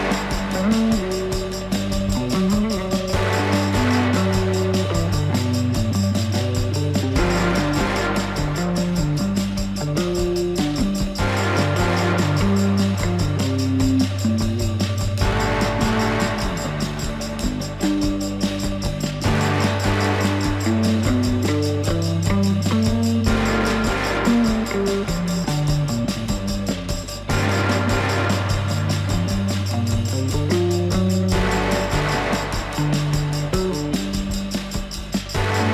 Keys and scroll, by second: 11.8 alt+w, 23.8 alt+w, 25.9 F4, 31.2 ctrl+z.